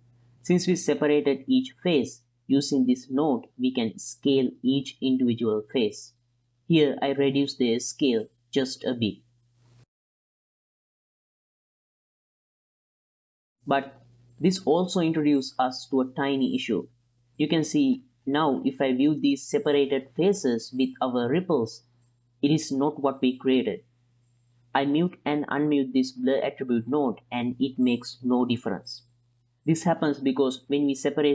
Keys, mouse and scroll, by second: 0.2 click, 0.7 middle click, 1.2-9.6 shift+drag, 9.9 ctrl+drag, 10.4-11.8 drag, 13.1-13.6 middle drag, 13.6-14.3 drag, 15.0 ctrl+shift+click, 16.4 ctrl+shift+click, 17.6-18.0 ctrl+drag, 18.3-20.3 drag, 21.0-21.4 drag, 21.4-22.1 middle drag, 22.6 ctrl+shift+click, 23.6 ctrl+shift+click, 24.5 ctrl+shift+click, 25.0-26.1 middle drag, 27.1 m, 28.4 m, 29.7 m, 30.4 m.